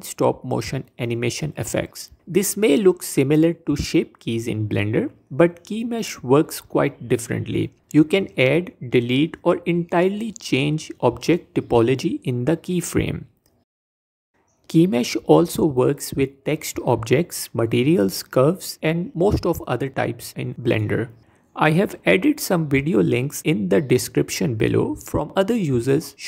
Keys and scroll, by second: 13.9 Tab, 18.6 shift+d, 19.0 shift+d, 19.6 s, 20.9 shift+d, 22.0 s.